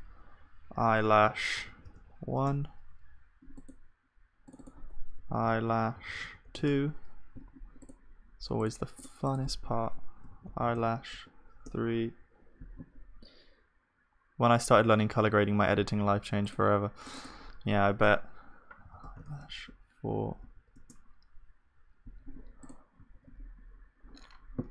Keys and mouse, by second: 8.5-13.8 middle drag, 18.9 e, 20.4 BackSpace, 23.1-24.6 drag, 23.1 ctrl+s.